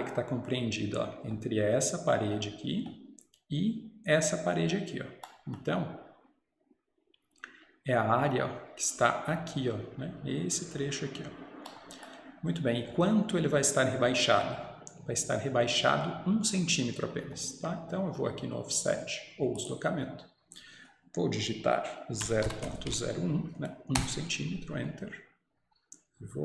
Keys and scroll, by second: 24.0 Return, 24.0 typing.